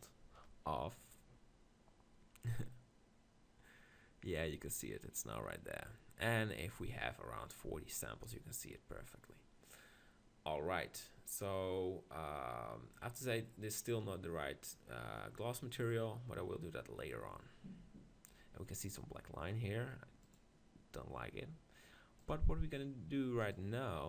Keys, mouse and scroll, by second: 0.3 click, 23.4-24.0 right drag.